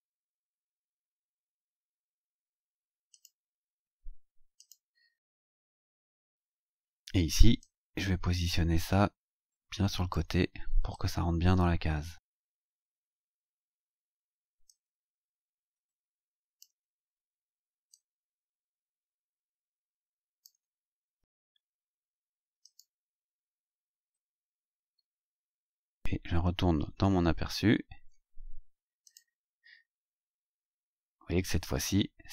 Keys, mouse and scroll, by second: 1.4 click, 1.7 click, 3.1 click, 4.6 click, 5.8-6.7 scroll up 4, 7.6-10.3 drag, 10.9-13.7 drag, 14.6-16.8 drag, 17.0-17.3 scroll down 2, 17.9-20.6 drag, 20.8-21.4 scroll down 4, 22.6 click, 25.2-26.7 scroll down 3, 26.7-27.7 scroll down 4, 28.0 scroll down 2, 29.0 click.